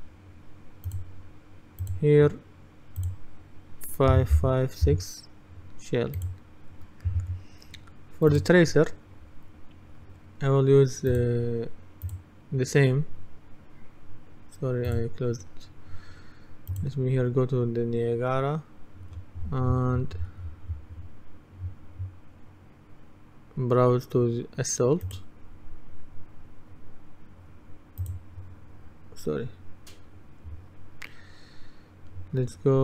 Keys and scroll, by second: 4.2-4.9 typing.